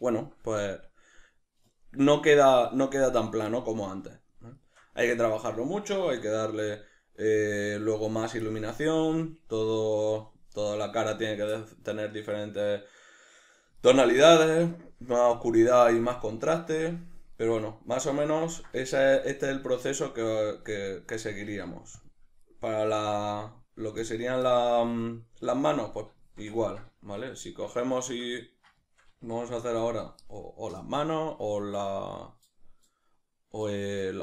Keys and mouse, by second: 22.1 z, 22.5-24.1 right drag, 24.1 Tab, 24.5-29.9 shift+middle drag, 29.4 f, 29.9 click.